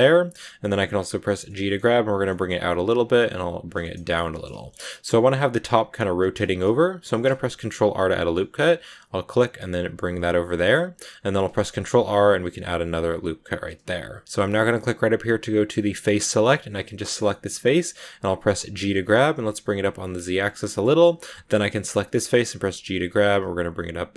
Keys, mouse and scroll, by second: 0.5 g, 1.3 middle click, 1.7 g, 2.2 middle click, 2.5 g, 3.7 middle click, 4.6 scroll up 2, 4.9-6.5 middle drag, 6.5 scroll up 1, 6.9 ctrl+r, 10.4 middle click, 10.8-11.3 scroll up 1, 11.3 ctrl+r, 15.7 click, 16.6 right click, 16.8 scroll down 1, 16.9 shift+middle click, 17.4 scroll up 1, 17.7 middle click, 18.6 g, 20.3 scroll down 3, 20.4 middle click, 20.7 scroll up 2, 21.3 shift+right click, 21.6 middle click, 22.5 g.